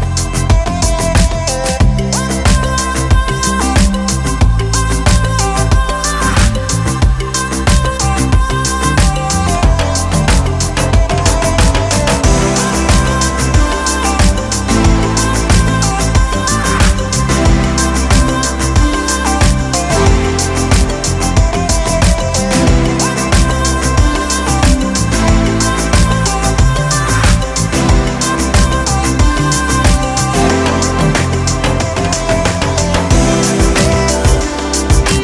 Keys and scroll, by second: 6.3 Escape, 6.4 d, 7.0 2, 7.4 1, 7.7 Return, 9.4 2, 9.6 Return, 11.3 Escape, 14.2 Escape, 14.3 d, 14.7 4, 16.9 Escape, 17.2 d, 17.7 0, 17.8 Return, 18.3 0, 18.5 Return, 20.1 5, 20.2 Return, 21.8 1, 22.0 Return, 26.0 -, 29.4 -.